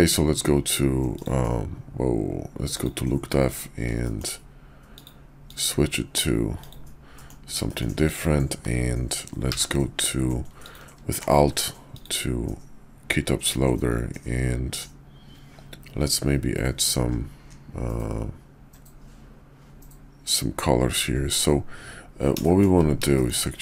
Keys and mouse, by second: 1.1 click, 2.7 click, 3.3 middle click, 4.0 shift+click, 4.8-6.8 drag, 7.1 middle drag, 7.6 shift+drag, 9.3 q, 22.4 shift+middle click, 23.1 shift+middle click.